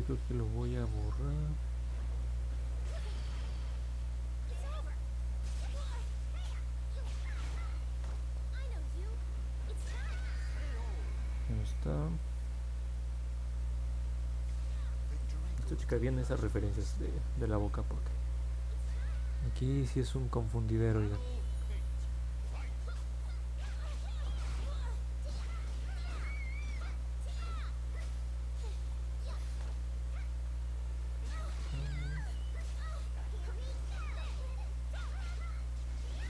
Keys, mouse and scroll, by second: 7.7 click, 9.2 click, 14.5 middle click, 15.1-16.2 alt+drag, 16.5 middle click, 17.1 alt+middle click, 25.9 click, 26.7 click, 28.3 click, 28.8 click, 29.4 click, 29.9 click, 30.5 click, 31.1 click, 31.6 click, 33.0 click, 33.2 click, 33.5 click, 33.8 click, 34.1 click, 34.4 click, 34.7 click, 35.0 click, 35.3 click, 35.7 click, 36.0 click.